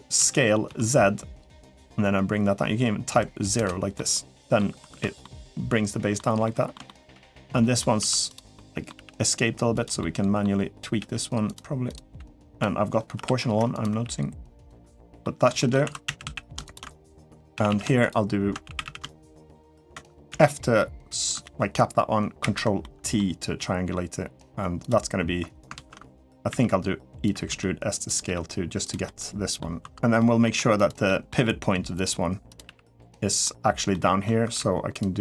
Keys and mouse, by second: 3.7 middle click, 4.8 alt+z, 5.0 middle click, 6.2 middle click, 6.7 shift+middle click, 7.3 middle click, 7.9 1, 8.1 click, 8.4 middle click, 9.8 middle click, 9.8 g, 10.8 g, 11.6 click, 11.9 g, 12.9 o, 13.5 click, 13.7 g, 14.6 middle click, 15.4 shift+middle click, 15.6-18.6 typing, 16.5 alt+shift+click, 19.1 alt+shift+click, 20.1 f, 22.2 ctrl+t, 22.6 middle click, 24.6 click, 25.7 ctrl+z, 26.3 e, 27.3 s, 28.0 g, 28.8 middle click, 29.6 2, 29.9 middle click, 30.3 1, 30.5 click, 30.8 middle click, 32.4 g, 32.9 middle click, 33.7 middle click, 34.2 3, 35.0 middle click.